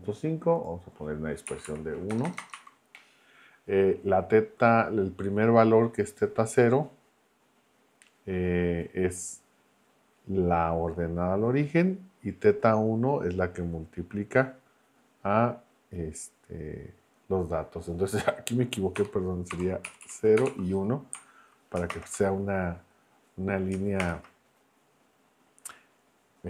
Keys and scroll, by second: 1.5 Right, 2.1 BackSpace, 2.5 1, 19.0 BackSpace, 19.5 0, 19.9 Right, 20.4 BackSpace, 20.4 1, 24.0 shift+Return.